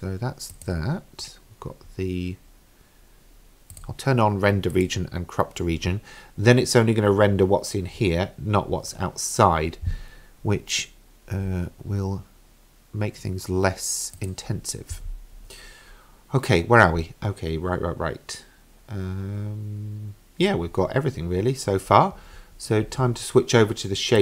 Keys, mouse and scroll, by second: 0.5 click, 3.8-4.2 drag, 4.8 click, 14.2 click.